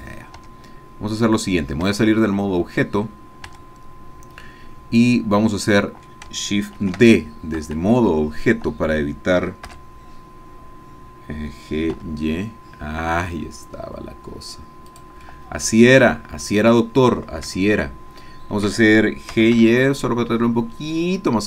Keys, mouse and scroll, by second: 0.4 Tab, 1.9 Tab, 4.1 Tab, 4.4-6.3 drag, 6.8 shift+d, 7.5 Escape, 10.1 g, 12.0 y, 14.9 click, 15.3 middle click, 15.6-17.6 drag, 17.7-18.8 shift+drag, 19.3 g, 19.5 y.